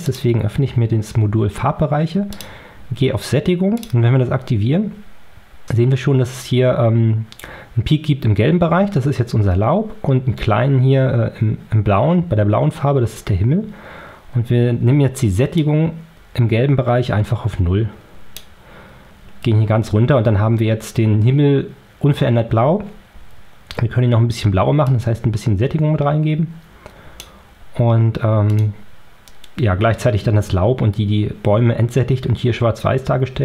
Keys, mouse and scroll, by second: 2.2 click, 3.7 click, 15.5-18.4 drag, 24.7-27.3 drag, 28.4 click.